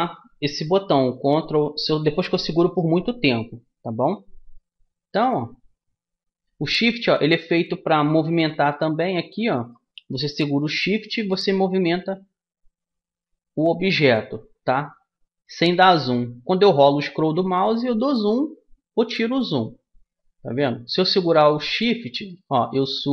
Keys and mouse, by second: 2.5-5.9 middle drag, 6.0 middle click, 6.8 middle click, 9.5-10.8 middle drag, 12.7 middle click, 16.8-23.1 middle drag.